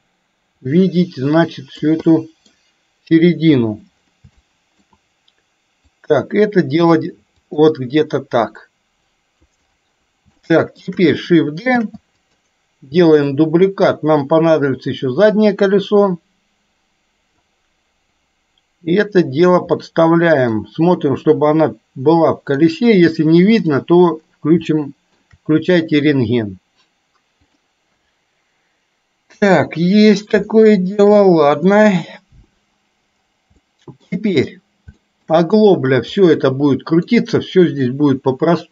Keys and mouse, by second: 2.2 middle click, 3.5 KP_3, 4.5 shift+middle click, 6.0-7.0 drag, 7.6 click, 7.8-9.5 drag, 10.5 shift+middle click, 11.8 shift+d, 13.5-17.5 drag, 18.3-19.6 drag, 19.8 middle click, 21.1-22.6 middle drag, 24.7 shift+middle click, 29.5 KP_3, 30.7 shift+middle click, 33.7 shift+middle click, 35.1 shift+middle click, 36.2-37.2 middle drag.